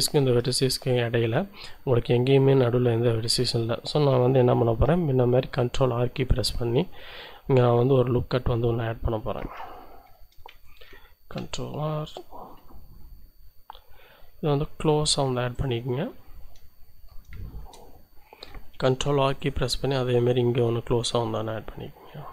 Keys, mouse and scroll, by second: 0.2 ctrl+Tab, 0.9 click, 2.3 scroll down 1, 4.5 ctrl+r, 8.6 Escape, 9.6 z, 10.0 a, 10.6 ctrl+z, 11.0 ctrl+r, 11.5 ctrl+click, 15.5 click, 15.8-16.1 scroll down 1, 16.2-17.2 shift+drag, 17.4 shift+click, 17.6-18.1 shift+scroll up 1, 18.9 ctrl+r, 19.4 ctrl+click.